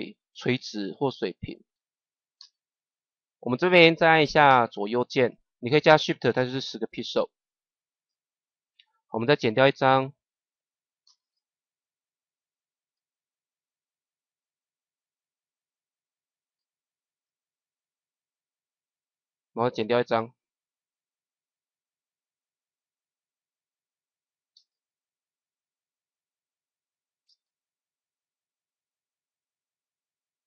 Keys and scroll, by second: 1.7 Left, 2.3 shift+Left, 4.4 shift+Left, 7.0 Left, 10.9 shift+Left, 17.9 Right, 24.4 shift+Left, 27.2 shift+Left, 29.5 shift+Right.